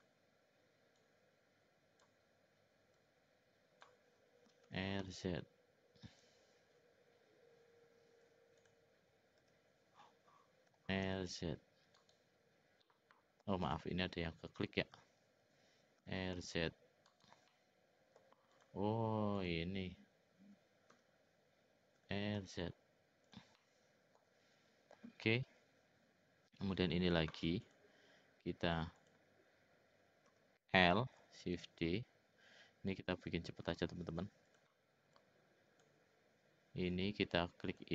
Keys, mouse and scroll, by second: 1.0-2.1 drag, 2.9-3.9 drag, 4.6 r, 8.6 click, 9.4 l, 10.7 r, 14.9 l, 16.0 r, 17.5 middle click, 18.2 scroll down 1, 18.5 click, 19.3 click, 20.9 l, 22.0 r, 23.6 middle click, 27.6 click, 29.0 click, 30.3 l, 31.4 shift+d, 35.1 click, 37.6 click.